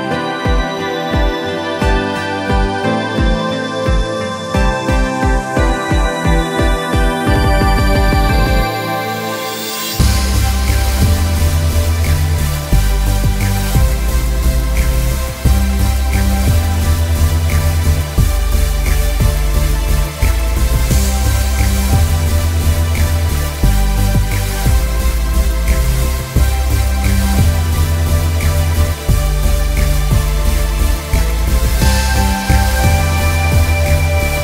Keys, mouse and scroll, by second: 1.3-1.8 alt+scroll down 3, 1.5-2.8 typing, 2.2-2.5 scroll up 2, 2.3 click, 2.7 scroll down 1, 3.2 click, 4.1 click, 5.3 Tab, 5.6 click, 12.8 click, 14.4 click, 15.8 click, 16.7 click, 17.2 alt+scroll down 1, 17.3 space, 17.5 alt+scroll up 1, 18.2 click, 18.5 space, 18.7 click, 19.8 space, 20.0 click, 22.8 click, 23.2 space, 23.4 scroll up 1, 23.7 click, 25.0 click, 26.0 click, 26.5 click, 27.1 click, 27.3 z, 27.4 click, 28.5 space, 28.7 scroll up 1, 28.8 click, 29.5 click, 30.2 scroll down 1, 30.7 scroll up 1, 31.0 click, 31.7 scroll down 1, 32.1 click, 32.4 scroll down 1, 32.6 click, 33.0 scroll up 1, 33.3 click.